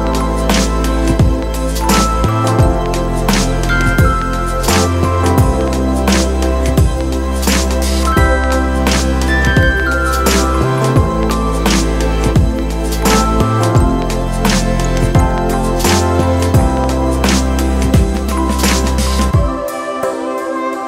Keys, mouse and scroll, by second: 6.6 ctrl+t, 14.2 ctrl+click, 18.3 ctrl+click.